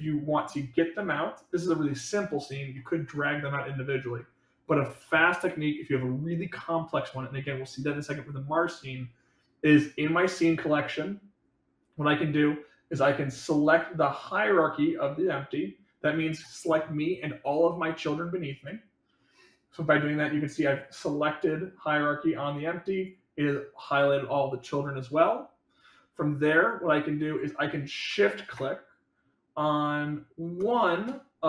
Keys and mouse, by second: 1.5 click.